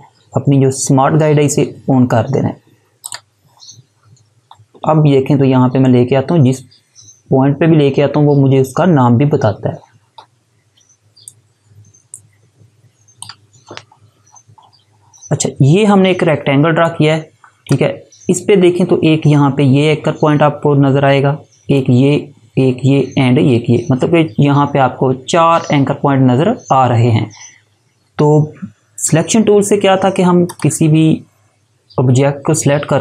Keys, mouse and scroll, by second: 3.1 click, 5.0 alt+scroll up 1, 10.8 space, 11.2 click, 11.4 space, 14.3 scroll down 1, 16.8 click, 30.5 click.